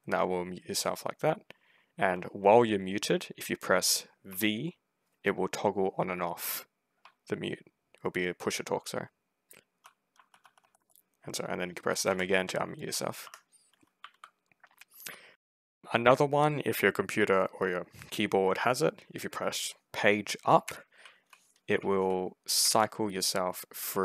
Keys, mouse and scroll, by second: 4.1 v, 6.9 v, 10.0 v, 10.3 v, 10.5 v, 10.6 v, 11.9 m, 13.1 Escape, 13.9 s, 14.8 w, 15.6 s, 20.9 d, 21.6 s, 23.0 s, 23.8 a.